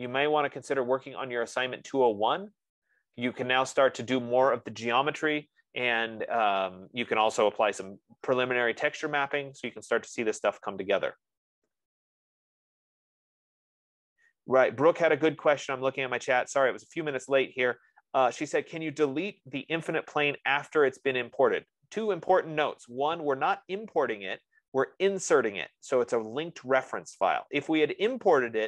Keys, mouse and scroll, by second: 3.9-9.1 drag, 9.2 F15, 10.0 F15.